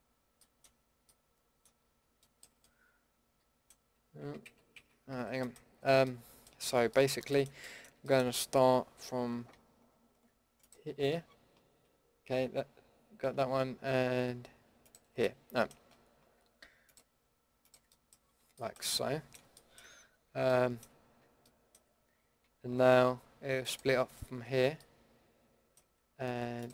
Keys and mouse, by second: 0.4 middle click, 4.2 ctrl+z, 4.4 ctrl+z, 4.7 ctrl+z, 5.2 a, 11.2 middle click, 12.3 middle click, 14.8-20.5 middle drag, 23.6-26.6 middle drag.